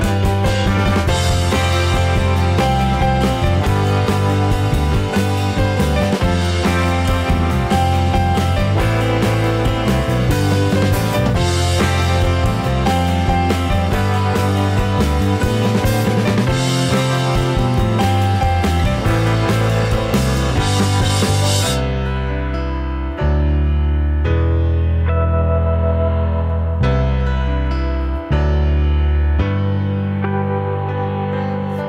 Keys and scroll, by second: 2.8 ctrl+=, 7.3 ctrl+c, 7.7 ctrl+v, 15.7 Delete, 21.4 Down, 22.5 Up, 22.6 Down, 23.1 Up, 25.1 Down.